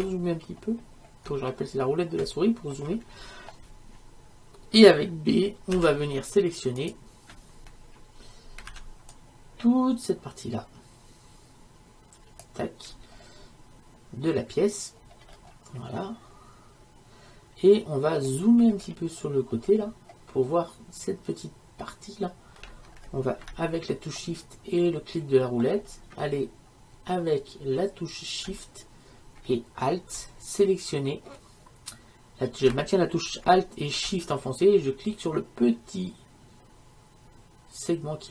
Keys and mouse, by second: 0.4 middle click, 2.0-5.8 middle drag, 5.8 b, 8.8 b, 15.2-38.3 middle drag.